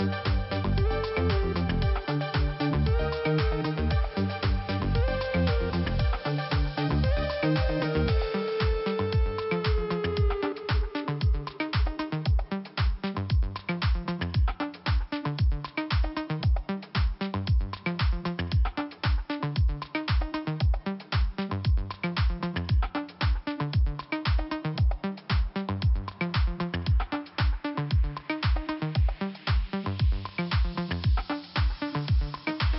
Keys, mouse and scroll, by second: 0.7 middle click, 0.8 click, 1.3-2.0 scroll down 1, 2.0 p, 2.7-3.0 scroll down 2, 4.0 click, 5.4 scroll up 2, 6.3 click, 6.3 click, 6.9 click, 9.2 click, 9.3 click, 10.1 scroll down 1, 11.2 click, 15.2 click, 15.3 click, 16.2 click, 18.8 click, 18.9 click, 19.6 click, 19.6 click, 20.3 click, 20.3 click, 20.8 click, 22.7 click, 25.1 scroll up 1, 26.7 click, 26.8 click, 27.3 click, 29.3 scroll down 1, 30.6 click, 32.0 scroll down 1, 32.5-32.7 scroll up 1.